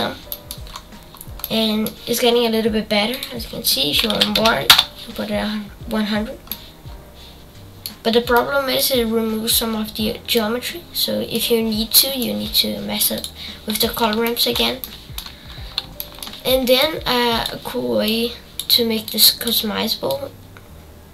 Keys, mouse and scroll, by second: 0.3 middle click, 0.7-1.2 scroll up 8, 1.4-5.3 middle drag, 5.3 KP_0, 5.8-6.5 scroll down 9, 6.5-8.0 middle drag, 8.0 scroll up 4, 8.3-9.9 middle drag, 9.9-10.3 scroll down 2, 10.3-13.1 middle drag, 13.1-21.1 drag.